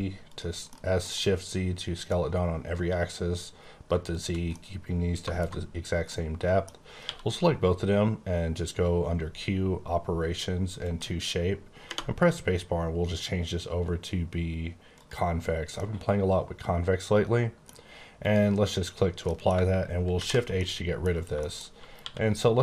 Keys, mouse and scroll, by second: 0.3 click, 0.6 middle click, 3.9 shift+middle click, 4.0 shift+click, 4.4 middle click, 6.0 middle click, 6.9 q, 10.7 click, 14.9 click, 15.7 middle click, 18.2 click, 18.9-19.2 scroll up 1, 19.2 middle click, 20.1 shift+h, 20.5 middle click, 21.0 scroll up 3, 21.4 shift+middle click, 21.9 q.